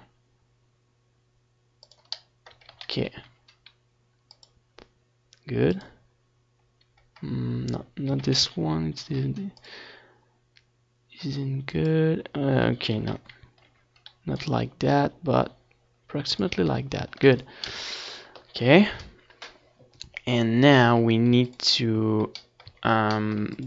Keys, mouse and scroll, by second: 2.5 click, 2.9 Tab, 3.1 ctrl+s, 6.0 middle click, 6.7 ctrl+s, 7.4 Tab, 7.9 a, 8.6 ctrl+s, 11.1 click, 15.9 KP_7, 16.9-19.0 middle drag, 19.0-22.4 right drag, 20.2-21.9 drag, 21.6 middle click, 22.4-23.6 middle drag.